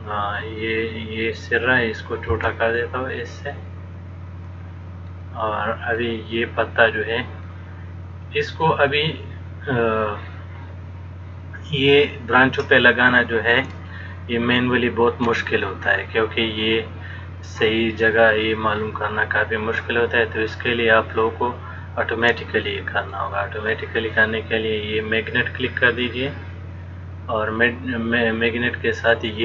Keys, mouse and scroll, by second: 2.5 s, 5.5 middle click, 7.8 click, 14.1 shift+middle click, 22.8 shift+middle click, 26.2 click.